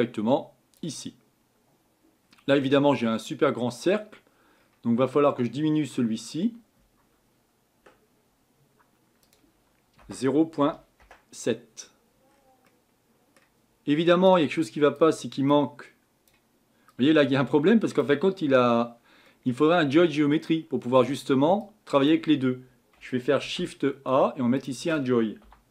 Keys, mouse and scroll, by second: 0.8 click, 11.0-25.7 drag.